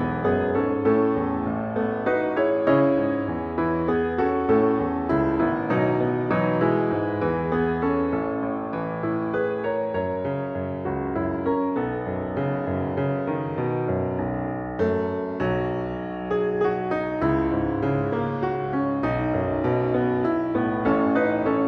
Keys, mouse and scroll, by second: 5.3 ctrl+d, 14.5 ctrl+d.